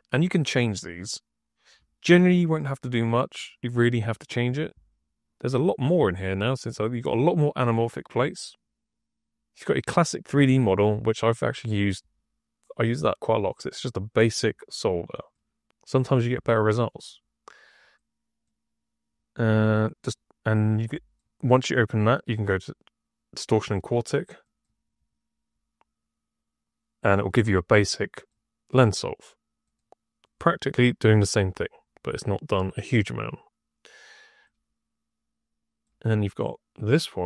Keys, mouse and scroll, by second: 9.5 click, 12.6 click, 13.4 click, 15.2 click, 17.7 click, 18.3-21.0 drag, 22.4-23.5 drag, 24.3 click, 28.0 click, 29.5 click, 30.1 click, 30.6 click, 30.9 click, 31.3 click, 32.6 click, 34.3-35.7 drag.